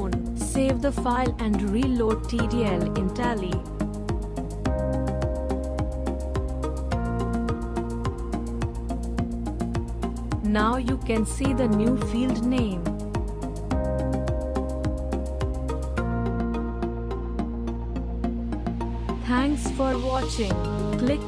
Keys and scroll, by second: 0.4-1.5 typing, 3.4 typing.